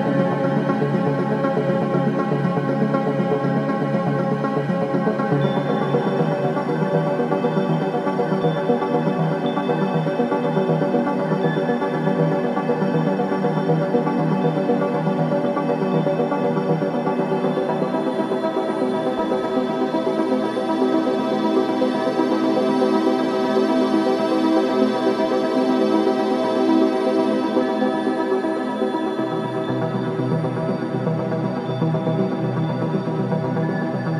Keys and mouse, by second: 0.0 g, 2.2 shift+click, 4.2 ctrl+s, 5.3-6.8 drag, 6.4 space, 9.4 space, 10.9 0, 13.0-14.2 ctrl+alt+drag, 15.8 click, 17.2 KP_0, 18.9 click, 21.1 click, 22.5-27.9 drag, 28.1 space, 30.5 space, 31.5 ctrl+s.